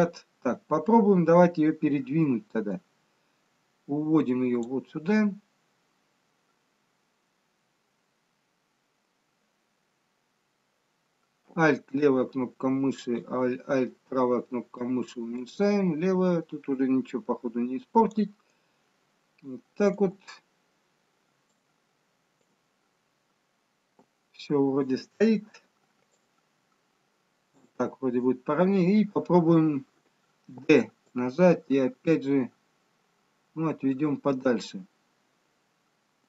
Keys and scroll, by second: 30.6 d.